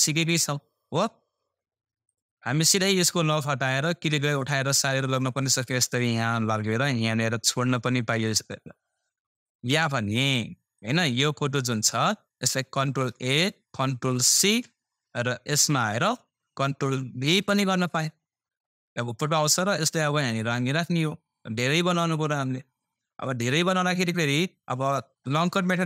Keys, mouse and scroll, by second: 2.0-9.6 drag, 4.4 typing, 9.6 Delete, 10.7 click, 13.1 ctrl+a, 15.5 click, 17.2 ctrl+v, 19.1-23.3 drag, 21.0 typing.